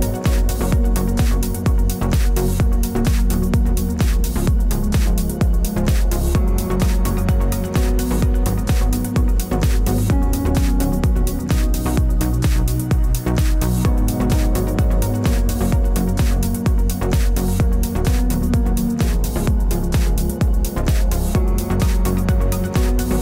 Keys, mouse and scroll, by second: 0.3 middle click, 1.5 click, 4.6 click, 5.1 middle click, 6.7 click, 7.5 click, 8.4 click, 9.4 scroll up 5, 9.5 ctrl+t, 9.5 ctrl+z, 9.8 click, 10.0 click, 10.5 ctrl+t, 11.1-12.1 scroll up 6, 11.3 middle click, 13.5 click, 14.3 click, 15.1 click, 17.6 click, 18.9 click, 19.3 click, 19.5 click, 19.9 click, 20.1 click, 20.4-21.1 scroll down 6, 20.6 middle click, 21.2 click, 22.0 click, 22.8 click.